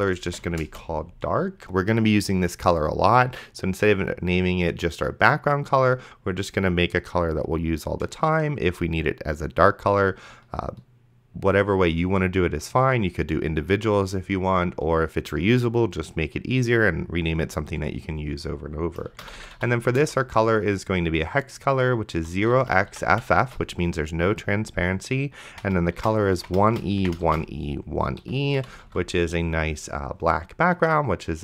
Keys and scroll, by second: 0.0-0.7 typing, 19.0-20.1 typing, 22.2 0, 22.4 x, 23.2 shift+f, 25.5-27.6 typing, 28.2 End, 28.6 ;, 29.1 ctrl+s.